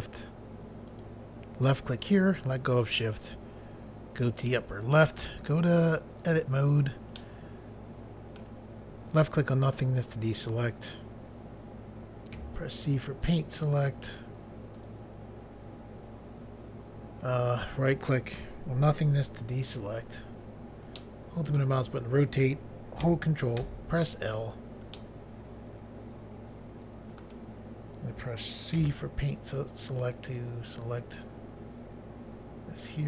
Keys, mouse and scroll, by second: 0.8 shift+click, 4.6 click, 6.1 click, 7.1 middle click, 9.1 click, 12.3 c, 13.2 click, 14.7 click, 17.6 right click, 20.9 middle click, 23.6 ctrl+i, 24.9 middle click, 28.8 c, 30.3 click.